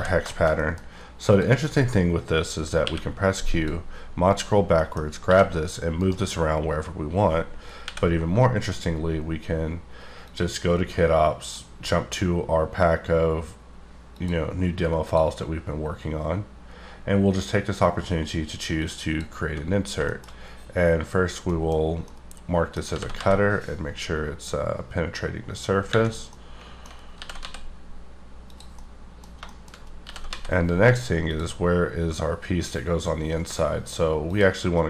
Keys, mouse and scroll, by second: 0.3 shift+middle click, 1.2 click, 2.8 q, 3.5 click, 4.3 click, 4.8 middle click, 5.2 g, 6.0 right click, 9.8 n, 10.2 click, 11.3 click, 15.1 click, 19.0 click, 20.0 shift+middle click, 21.8 scroll up 2, 22.0 middle click, 22.9 g, 23.2 z, 26.1 scroll down 6, 26.2 scroll up 1, 26.3 middle click, 26.9 alt+scroll up 2, 27.1 g, 27.4 z, 28.5 click, 28.7 middle click, 29.8 scroll up 2, 30.0 g, 30.3 z, 31.3 click, 34.3 click.